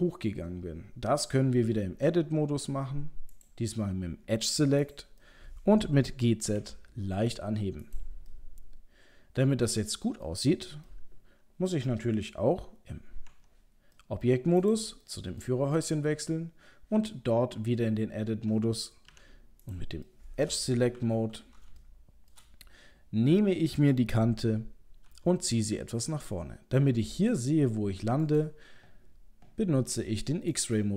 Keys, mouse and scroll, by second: 2.1 Tab, 3.4 click, 4.8 click, 5.2 middle click, 5.8 middle click, 6.5 g, 8.3 middle click, 10.2 middle click, 10.9 middle click, 11.7 middle click, 13.3 Tab, 14.0 middle click, 14.6 click, 15.1 middle click, 15.4 middle click, 17.0 Tab, 19.1 2, 19.7 click, 20.1 middle click, 21.0 KP_3, 21.7 shift+middle click, 22.3 middle click, 23.2-24.0 scroll up 1, 25.1 g, 30.5 click.